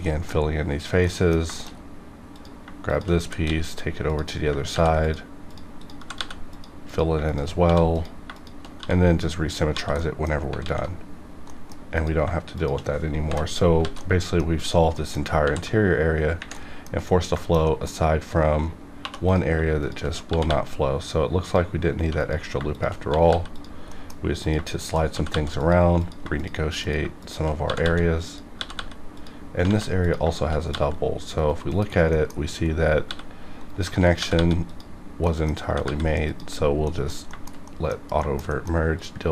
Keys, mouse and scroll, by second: 0.1 middle click, 0.3 scroll up 1, 1.0 middle click, 1.0 middle click, 1.5 shift+middle click, 2.2 click, 2.8 shift+click, 3.2 e, 3.4 x, 4.0 click, 4.7 ctrl+r, 5.0 click, 5.9 g, 6.1 g, 6.5 click, 7.2 shift+click, 7.6 f, 7.9 click, 8.2 click, 8.7 f, 9.7 f, 9.9 middle click, 10.6 alt+x, 11.4 middle click, 11.9 click, 12.5 shift+click, 13.2 j, 13.4 scroll down 2, 14.0 alt+middle click, 14.4-14.9 scroll up 2, 14.9 middle click, 15.4 ctrl+r, 16.5 middle click, 16.9 scroll up 1, 17.6 shift+middle click, 17.6 middle click, 18.1 scroll up 1, 19.0 2, 19.2 click, 19.8 shift+click, 20.2 g, 20.4 g, 21.4 click, 21.9 1, 22.1 click, 22.2 click, 22.7 shift+click, 23.0 g, 23.2 g, 23.5 click, 23.9 middle click, 24.4 click, 24.7 shift+click, 25.1 g, 25.3 g, 25.5 click, 26.0 click, 26.3 shift+click, 26.7 shift+click, 27.0 click, 27.1 shift+click, 27.6 g, 28.2 click, 28.5 g, 29.0 click, 29.1 click, 29.6 ctrl+z, 30.0 click, 30.2 click, 30.7 g, 31.3 right click, 32.1 middle click, 32.3 scroll up 1, 33.0 g, 33.6 right click, 34.1 g, 34.3 g, 34.6 click, 35.2 middle click, 35.4 scroll up 1, 35.5 scroll down 1, 35.6 g, 35.8 g, 36.2 click, 36.5 scroll down 1, 36.8 middle click, 36.9 middle click, 37.3 shift+middle click, 37.5 shift+scroll down 1, 37.6 middle click, 38.2 shift+middle click, 38.3 shift+scroll down 1, 38.5 shift+middle click, 38.9 click.